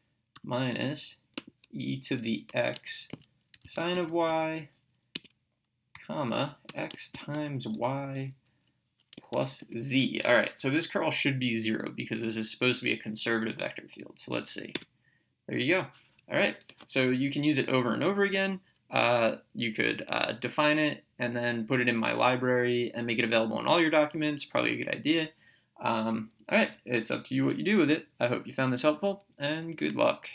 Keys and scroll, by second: 0.4 -, 2.5-4.8 typing, 2.8 Right, 5.2 Right, 6.0 ,, 6.8 x, 7.2 *, 7.8 y, 9.7 z, 14.8 Return.